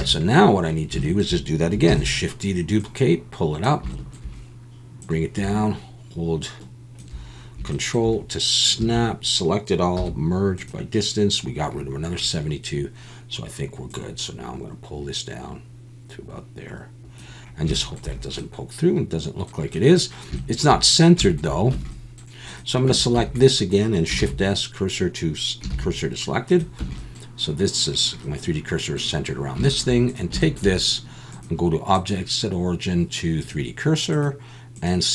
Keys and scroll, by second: 0.0 a, 1.9 shift+d, 8.8 a, 10.0 m, 21.7 Tab, 22.9 Tab, 23.2 a, 24.2 shift+s, 25.7 shift+s, 26.8 Tab.